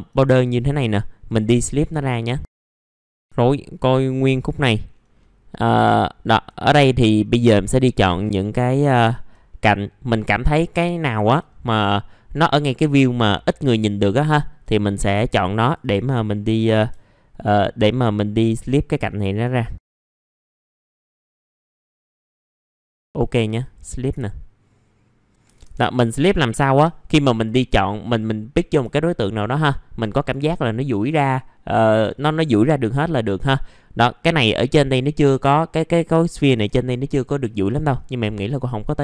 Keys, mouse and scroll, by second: 1.2 click, 1.6-2.2 scroll down 1, 2.3 alt+middle click, 2.7-3.1 scroll up 1, 3.2-4.3 scroll up 1, 4.3 middle click, 4.8-5.2 scroll down 1, 5.5 middle click, 5.9 alt+middle click, 6.7 scroll up 1, 7.8 click, 8.6 alt+middle click, 9.4 middle click, 10.8 alt+middle click, 11.5-12.9 scroll up 1, 12.9 scroll down 1, 13.3 alt+middle click, 14.7-15.6 scroll up 1, 15.6 click, 16.2-16.9 scroll down 1, 18.6-19.0 scroll up 1, 20.0 ctrl+click, 20.2 middle click, 20.4 scroll down 1, 20.8 scroll up 1, 21.0 ctrl+click, 21.4 scroll up 1, 21.8 ctrl+click, 22.0 scroll down 1, 22.3 scroll up 1, 22.6 ctrl+click, 22.8 scroll down 1, 23.0 right click, 23.6 click, 24.2 alt+middle click, 26.0 middle click, 27.3 click, 28.5 middle click, 28.9 alt+middle click, 30.2-31.9 scroll up 1, 33.1 middle click, 36.3 1, 37.4 F4, 37.7-38.2 scroll down 1, 38.3 alt+middle click.